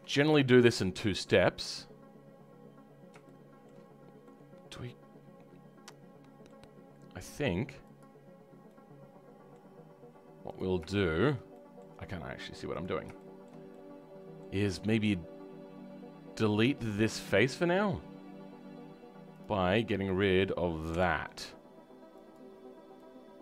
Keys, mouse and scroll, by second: 1.1 click, 1.5 scroll up 2, 3.2-7.9 shift+middle drag, 7.9 click, 8.7-10.5 middle drag, 10.5 click, 10.8-12.6 shift+middle drag, 12.6 click, 13.1-17.7 shift+middle drag, 17.7-22.2 drag, 22.9-23.4 middle drag.